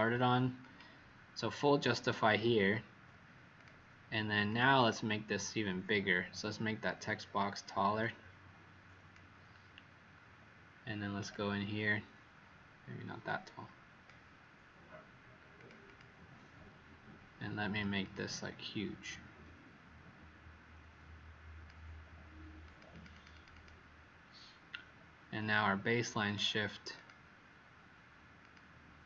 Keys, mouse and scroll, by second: 4.7 click, 6.5 Escape, 7.9 click, 15.8 click, 17.9 click, 22.9 click, 23.0 click, 23.2 click, 23.5 click, 26.2 click, 26.9 click, 28.3 click.